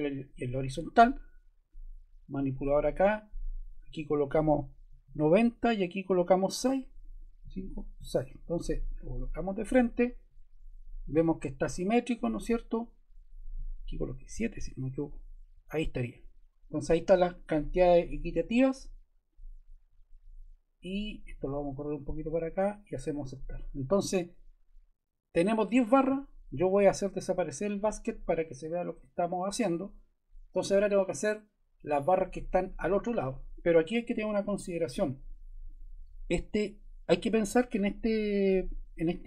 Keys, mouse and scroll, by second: 4.6-5.5 typing.